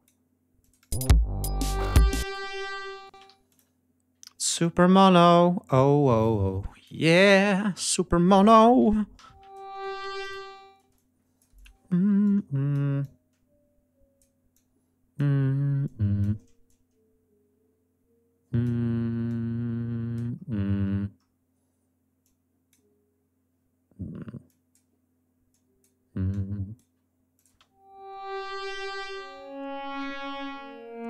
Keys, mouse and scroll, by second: 0.5 click, 0.8 space, 2.1 click, 3.0 space, 3.2 g, 3.4 click, 4.5-6.9 ctrl+drag, 9.1 l, 9.9 e, 10.1 click, 10.7 space, 10.8 click, 11.8 d, 12.1 click, 12.9-14.3 drag, 14.4 click, 15.7 click, 16.6-18.7 drag, 19.2 click, 20.3-21.3 scroll down 5, 22.1 click, 24.4 click, 25.4 click, 26.2 click, 27.2 click, 27.4 space.